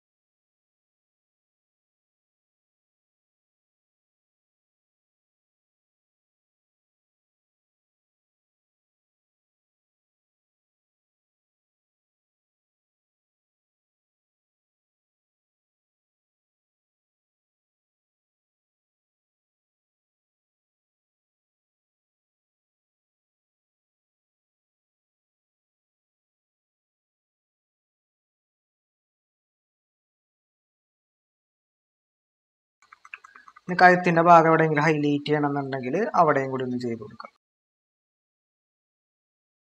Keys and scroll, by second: 6.8 typing, 10.4 ctrl+=, 12.7-13.1 typing, 16.3 typing, 18.9-19.6 typing, 21.6-25.9 typing, 29.1 typing, 32.7-33.4 typing.